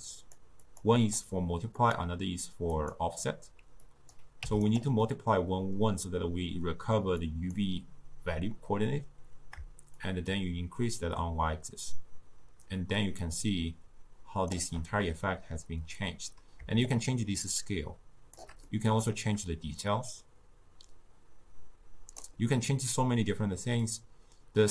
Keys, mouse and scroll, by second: 0.3-1.3 drag, 3.1-4.9 drag, 7.3-13.1 drag, 17.1-24.7 shift+drag.